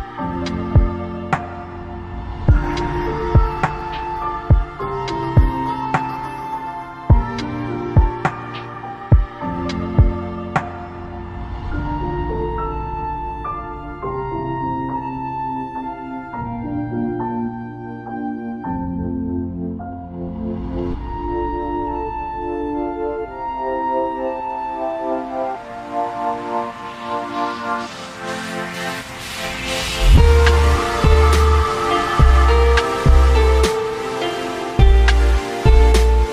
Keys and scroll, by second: 3.7 ctrl+g, 21.6 ctrl+q, 21.8 ctrl+k, 21.9 ctrl+u, 28.5 ctrl+a, 35.4 ctrl+Home.